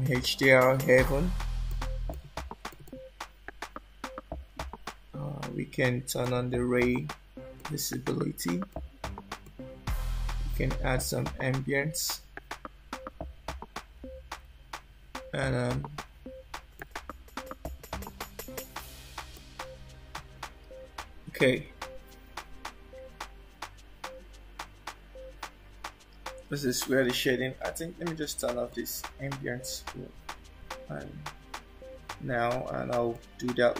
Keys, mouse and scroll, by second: 6.2 click, 7.5 click, 8.6 click, 9.4 click, 16.7 middle click, 18.0 scroll up 2, 19.3 middle click, 20.5 scroll down 1, 21.0 scroll down 1, 23.2 click, 23.4-24.1 scroll up 7, 28.7 click, 30.6 scroll up 1, 33.3 click.